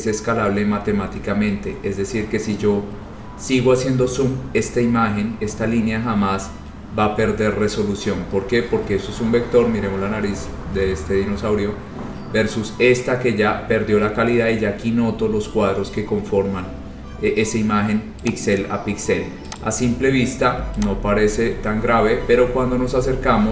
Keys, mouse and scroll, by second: 0.1-0.4 scroll, 1.0 scroll, 1.5 scroll up 11, 1.7 scroll, 1.8 scroll up 1, 1.9 scroll down 10, 2.0-5.5 scroll, 5.8-7.7 scroll, 7.9 scroll down 10, 8.3-9.9 scroll, 10.0 middle click, 10.3-13.3 scroll, 14.1 scroll, 15.1-17.9 scroll, 18.6 click, 19.7 click, 20.0-20.6 scroll, 21.0 click, 21.7 scroll, 22.1 scroll down 6, 22.4-23.5 scroll.